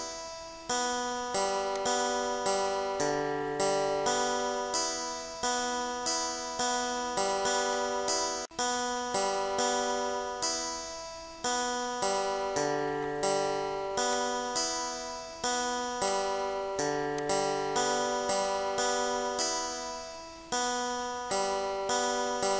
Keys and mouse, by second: 1.8 click, 7.8 click, 9.4 click, 13.0 click, 14.2 click, 15.1 click, 16.1 click, 17.2 click, 19.4 click, 20.4 click, 21.3 click.